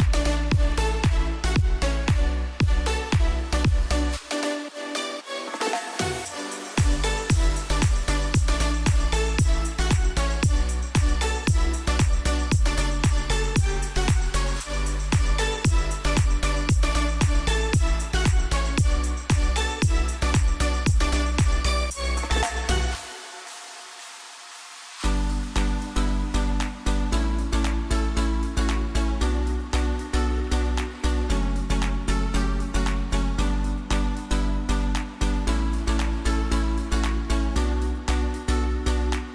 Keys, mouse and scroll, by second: 0.4 click, 3.4 right click, 4.6 click, 7.2-7.6 alt+scroll up 1, 8.3-13.6 drag, 14.2 click, 14.6 ctrl+j, 16.0 v, 18.2 ctrl+click, 21.5 click, 27.5 click, 27.7 ctrl+d, 32.0 click, 35.2-39.0 typing.